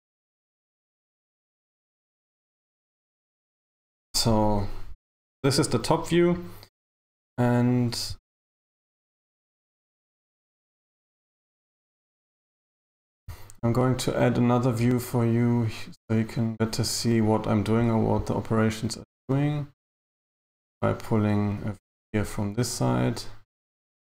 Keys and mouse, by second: 0.9 right click, 1.7 g, 10.3 z, 20.3 click, 23.9 click.